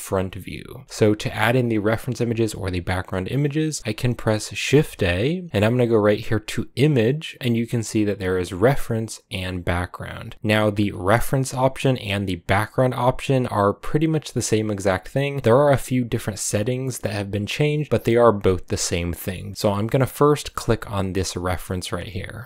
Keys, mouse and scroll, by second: 4.6 shift+a.